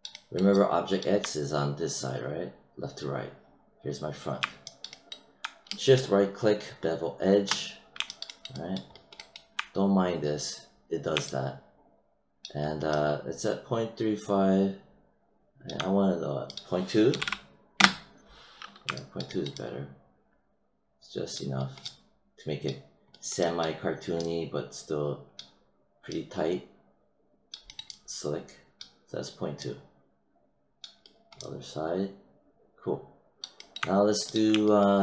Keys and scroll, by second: 17.0 ., 17.7 Return.